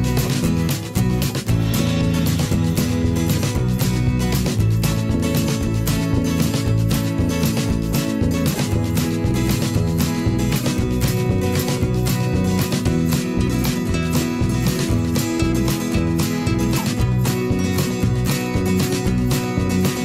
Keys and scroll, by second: 0.7 ctrl+], 0.9 ctrl+[, 1.6 ctrl+], 8.3 ctrl+], 10.4 ctrl+], 12.2 ctrl+], 16.6-20.0 typing.